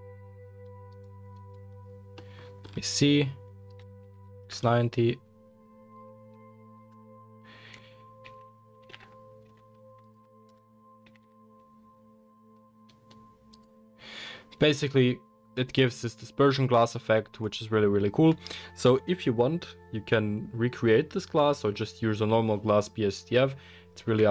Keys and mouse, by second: 0.9 middle click, 0.9 right click, 4.0 r, 8.3 alt+g, 8.9 g, 10.3 middle click, 10.4 KP_0, 11.0 g, 11.5 middle click, 11.9-13.2 middle drag, 13.5 middle click, 13.6-14.7 middle drag, 14.7 click, 15.1-17.2 middle drag, 22.2-24.3 drag, 22.2-24.3 right drag, 24.0 n.